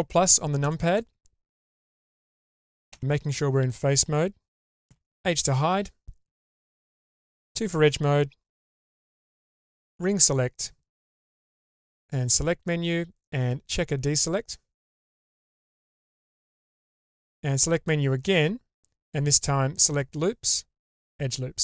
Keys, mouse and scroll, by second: 0.6 ctrl+KP_Add, 1.8 ctrl+z, 1.8 middle click, 2.9 3, 4.9 h, 6.6 2, 9.4 ctrl+alt+click, 11.8-14.8 drag, 15.7 ctrl+z.